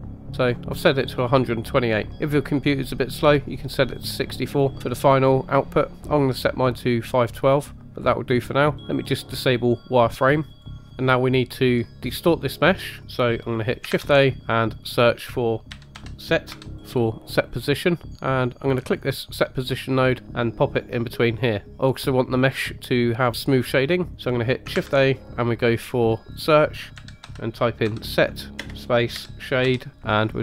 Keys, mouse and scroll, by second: 8.9-11.0 drag, 13.9 shift+a, 21.2 click, 21.3-22.1 typing, 23.8 middle click, 24.7 shift+a.